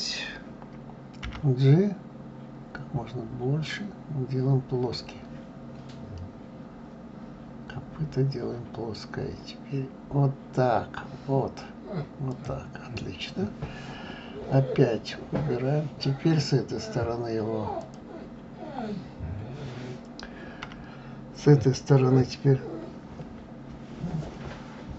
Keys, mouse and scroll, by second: 17.6 click.